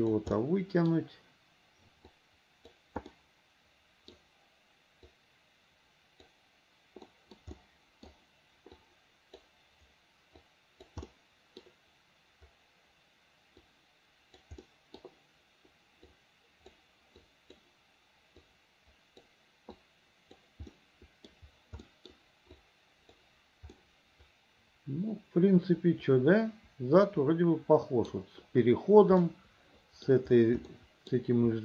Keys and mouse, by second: 0.5 middle click, 2.3 click, 3.2 middle click, 4.0 middle click, 5.2-6.4 drag, 7.3 middle click, 7.7 click, 8.9 middle click, 10.6 middle click, 11.2 click, 13.8 middle click, 14.7 click, 16.2 click, 17.3 click, 18.6 click, 19.9 click, 20.8 middle click, 21.9 middle click, 22.7 right click, 23.8-27.6 middle drag, 27.7 middle click, 29.3 middle click, 30.8 middle click.